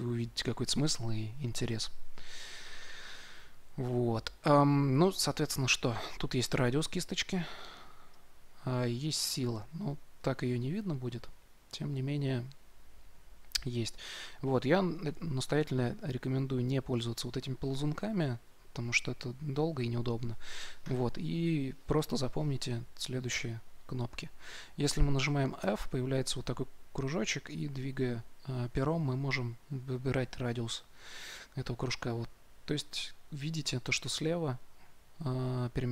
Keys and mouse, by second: 18.9-20.5 drag, 25.6 f.